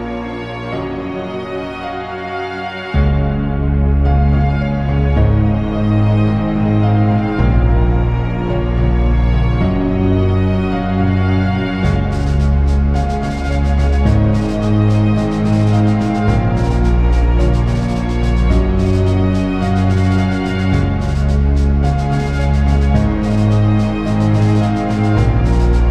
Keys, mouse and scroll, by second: 10.9 click, 16.1 click, 16.2 Tab, 22.7 Tab, 22.9 alt+a, 23.1 scroll down 3, 23.4 scroll up 2, 23.5 alt+a, 23.6 scroll down 2, 23.7 scroll up 3, 23.9 click, 24.5 s, 25.3 click.